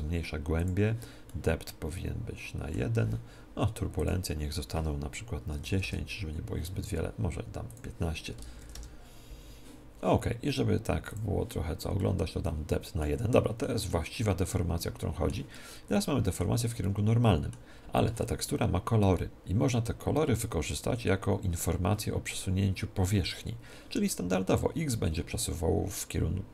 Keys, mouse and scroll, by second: 1.2 middle click, 2.2 middle click, 3.9-5.7 drag, 5.8 click, 7.6-9.5 drag, 11.0-12.9 drag, 11.9-18.5 middle drag.